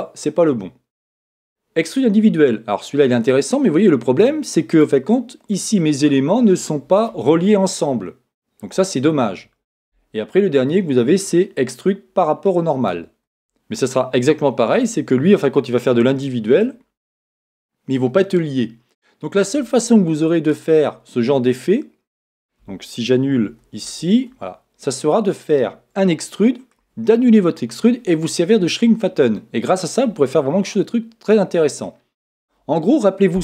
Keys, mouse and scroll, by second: 3.4 click, 5.6-7.3 middle drag, 11.3-13.0 drag, 20.3-22.3 middle drag, 23.6 super+z, 23.8 super+z, 25.0-27.8 middle drag, 29.4-31.3 middle drag.